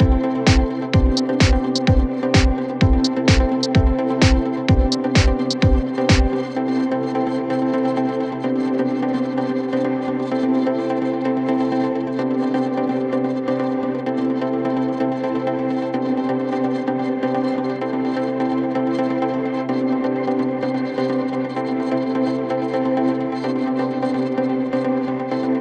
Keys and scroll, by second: 3.6 ], 4.2 F1, 7.8 4, 12.0 2, 16.4 f, 18.9 ,.